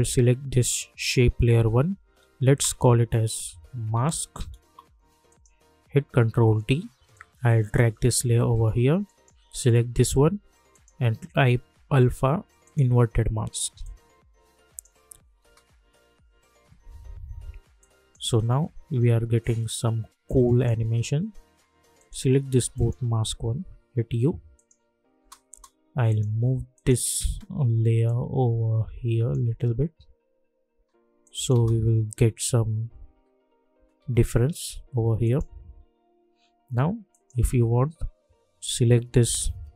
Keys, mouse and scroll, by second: 2.6 Return, 3.3-4.5 typing, 4.6 Return, 5.2 click, 6.3 ctrl+d, 7.1-15.4 drag, 15.4 space, 17.8 click, 18.2 space, 20.2-21.9 drag, 22.7 ctrl+click, 23.8 u, 24.5 click, 25.1 space, 26.1-29.5 drag, 29.5 space, 31.2 click, 31.5 space, 35.2 click, 35.7 u, 37.1 click.